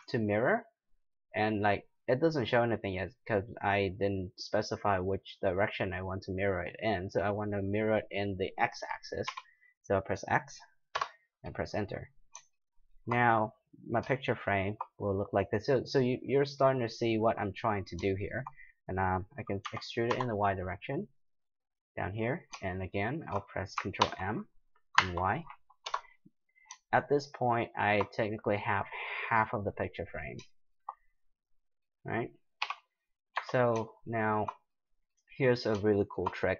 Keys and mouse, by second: 11.9-19.7 middle drag, 19.6 e, 22.7 middle click, 24.0 ctrl+m, 27.6 click, 29.4-31.3 middle drag, 32.6 KP_7, 33.4 a.